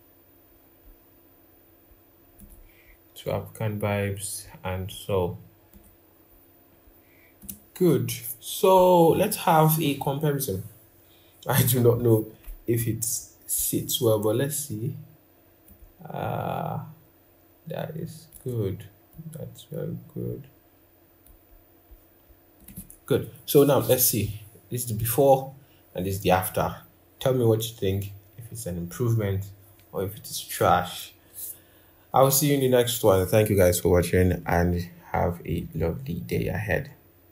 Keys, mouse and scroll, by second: 0.3-0.7 scroll, 0.9-1.2 scroll up 1, 1.3-3.1 scroll, 4.7-5.1 scroll, 6.1-6.5 scroll, 8.5-9.9 scroll, 10.2 scroll, 15.4 shift+click, 21.7-23.9 scroll, 24.8 scroll.